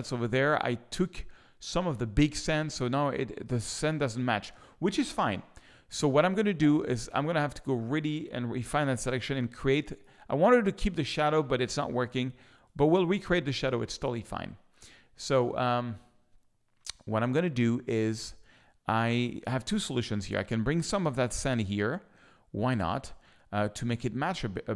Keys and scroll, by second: 5.9 s, 9.2 z, 11.4 z.